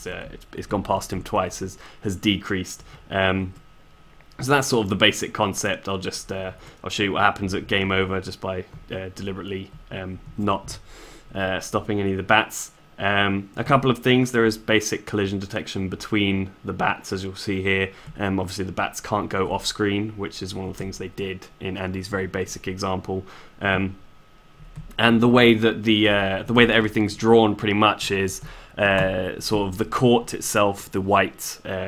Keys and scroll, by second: 4.2 s.